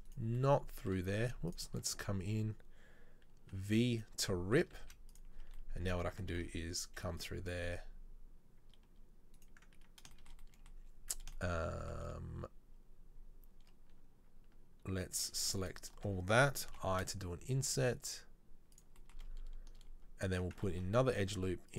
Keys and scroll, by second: 1.4 z, 3.7 v, 4.9 z, 6.5 ctrl+r, 20.8 ctrl+r.